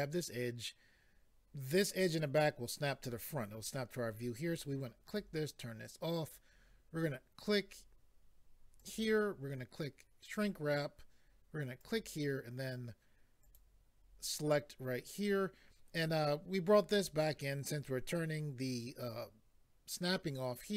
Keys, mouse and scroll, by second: 5.0 click, 8.8 click, 10.3 click, 10.4 click, 11.8 click, 11.9 click, 13.4 click.